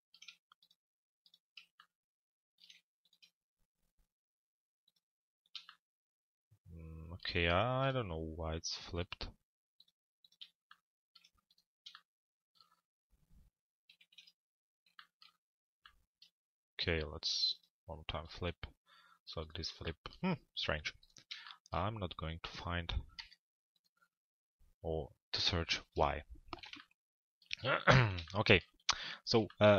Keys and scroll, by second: 14.0 ctrl+a, 23.1 BackSpace.